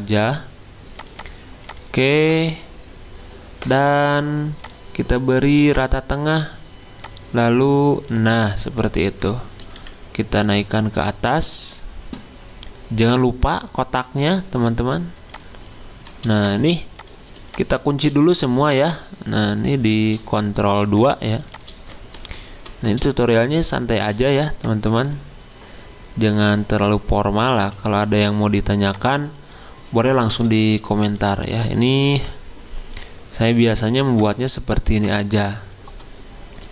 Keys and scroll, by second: 9.8 alt+Up, 20.8 ctrl+2, 27.6 t, 30.3 BackSpace, 31.2 BackSpace.